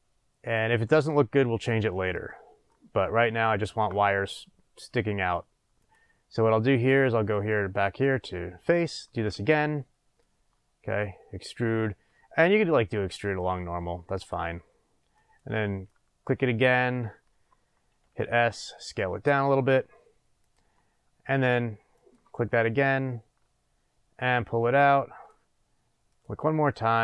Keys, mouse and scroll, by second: 3.9-4.2 scroll up 2, 5.8 click, 7.3 click, 7.8 click, 8.6 click, 10.1-13.6 drag, 15.1 click, 15.8 click, 18.0 s, 20.5 click, 21.0 scroll down 1, 21.1 scroll, 21.9 click, 22.5 click, 26.1 click, 26.6 click.